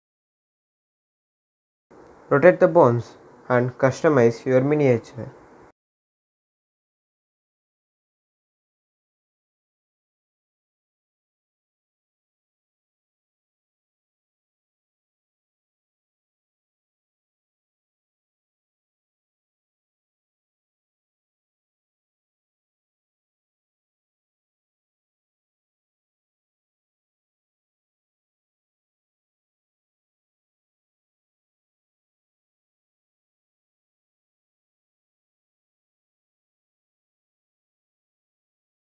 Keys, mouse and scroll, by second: 0.3 r, 2.0 click, 3.6 r, 5.4 click, 7.6 r, 10.4 click, 12.4 r, 14.0 click, 16.6 r, 17.5 click, 19.7 r, 21.8 click, 23.6 r, 24.8 click, 26.3 r, 27.7 click, 33.9 click, 35.3 r, 37.3 click.